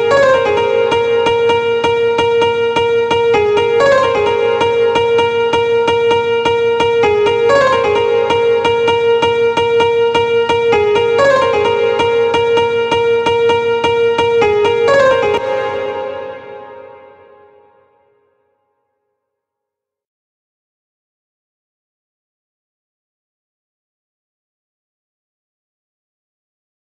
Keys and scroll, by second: 4.6 ctrl+b, 6.8 ctrl+b, 14.7 space.